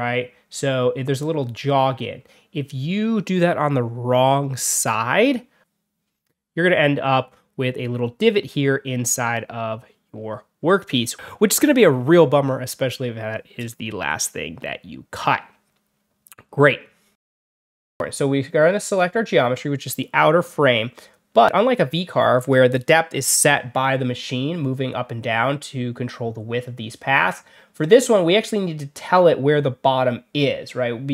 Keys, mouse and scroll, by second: 4.6 click, 18.8 click.